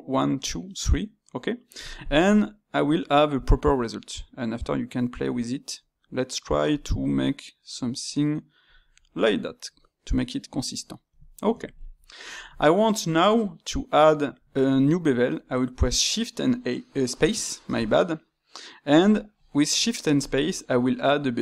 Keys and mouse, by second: 9.1-14.9 middle drag.